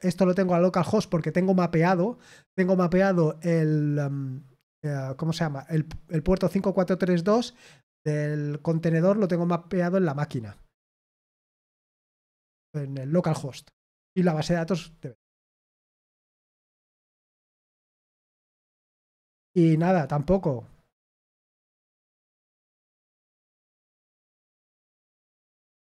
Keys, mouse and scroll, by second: 15.2-16.4 typing, 16.6 ctrl+p, 17.4 Return.